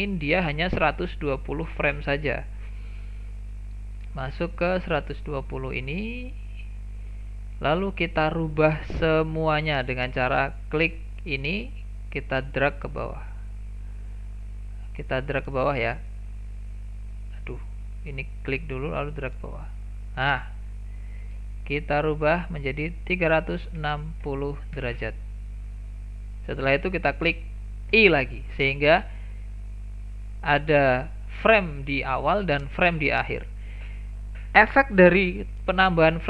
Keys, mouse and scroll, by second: 0.1-3.1 drag, 3.8-6.8 drag, 11.4-14.5 drag, 15.3-18.3 drag, 18.5-21.5 drag.